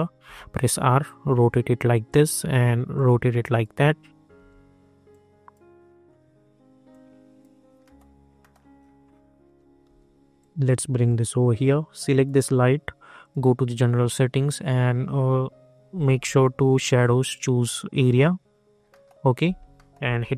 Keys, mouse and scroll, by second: 0.2 r, 1.0-4.3 drag, 4.3 w, 5.1-7.8 drag, 7.8 middle click, 8.7 scroll down 1, 9.4-9.8 typing, 10.3-12.1 drag, 14.5-15.3 scroll down 1, 16.8 click, 18.9 middle click.